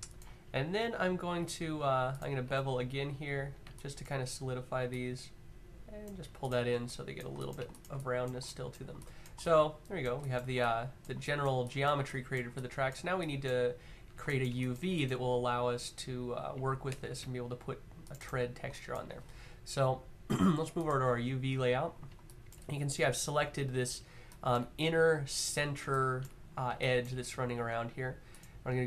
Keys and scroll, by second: 6.0 q.